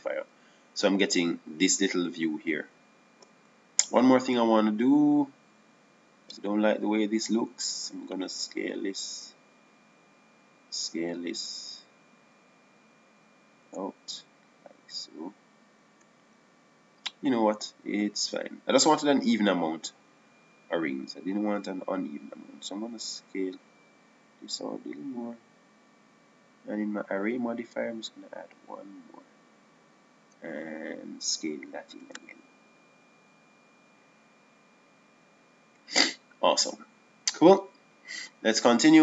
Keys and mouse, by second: 0.8-3.4 drag, 7.0 middle click, 7.7-9.8 drag, 11.6-13.2 drag, 12.9 s, 24.0 s, 33.5 s.